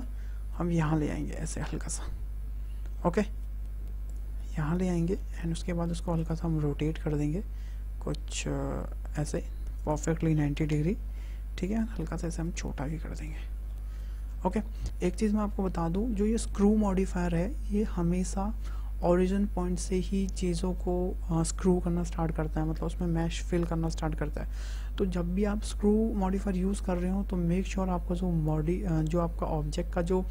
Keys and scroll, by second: 10.3 KP_9, 10.6 KP_0, 10.7 Return, 11.7 s.